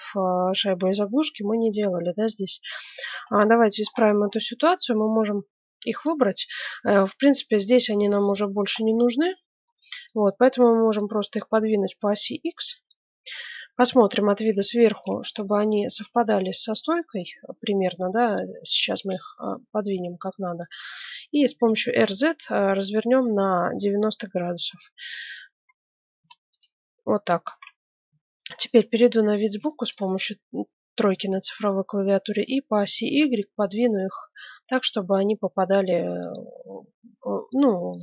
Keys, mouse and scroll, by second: 1.0-5.0 middle drag, 6.6-7.6 right drag, 8.6-10.9 middle drag, 10.9-12.7 drag, 13.6 KP_7, 14.6 middle click, 16.1 z, 16.9 middle click, 18.6 z, 19.4-21.4 middle drag, 21.6 r, 28.0 KP_3, 29.6-32.1 middle drag, 32.3 g, 37.1-37.5 scroll up 1, 37.5-38.0 middle drag.